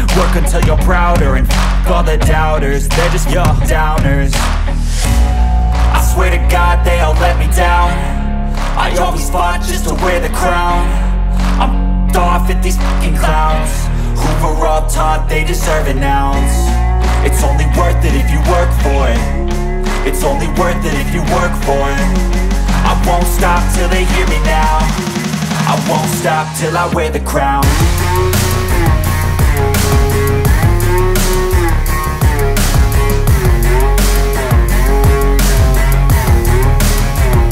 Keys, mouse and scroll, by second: 0.1 scroll up 1, 1.7-4.7 drag, 4.7 scroll down 1, 5.6-7.4 drag, 7.4 scroll down 1, 11.6 scroll up 1, 13.3-18.5 drag, 20.9 scroll up 1, 21.7 alt+scroll up 1, 23.3-29.3 drag, 29.3 scroll down 1, 32.0-35.3 drag, 35.3-35.8 scroll down 1, 36.1-36.6 ctrl+scroll down 2.